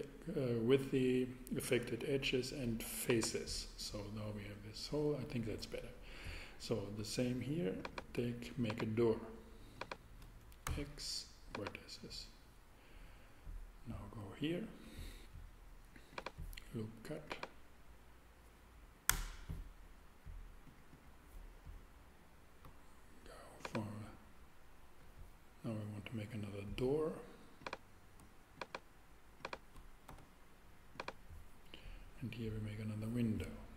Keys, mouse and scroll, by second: 10.6 shift+super+x, 11.3 x, 19.1 Return, 30.1 x, 30.8 x.